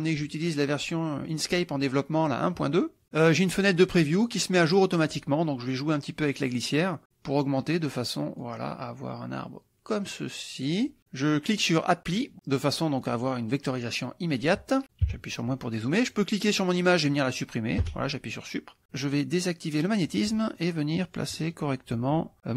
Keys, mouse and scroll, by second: 0.3 click, 1.3 click, 3.5-5.0 drag, 6.3-11.0 drag, 12.2 click, 15.1 KP_Subtract, 16.1 click, 18.0 Delete, 18.8 click, 19.8 click, 20.6 click, 21.4 middle click.